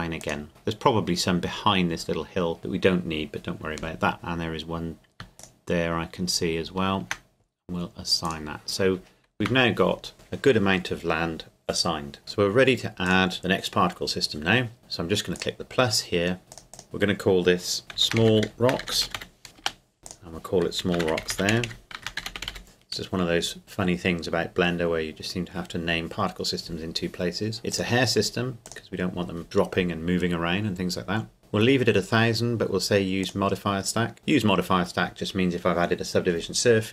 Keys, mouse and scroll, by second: 0.2-1.8 drag, 5.2 click, 5.4-7.6 shift+right drag, 8.2 click, 9.4 Tab, 12.2 click, 15.3-16.4 drag, 16.5-17.8 drag, 18.0-19.2 typing, 19.6 Return, 20.1 click, 21.0-22.4 typing, 22.6 Return, 27.7 click, 33.2 click.